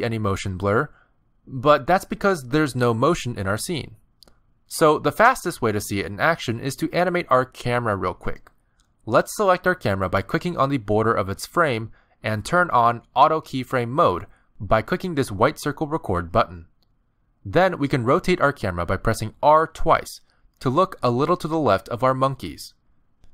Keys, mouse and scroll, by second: 11.2 click, 11.8 click, 12.7 click, 13.5 click, 15.5 click, 18.8 r.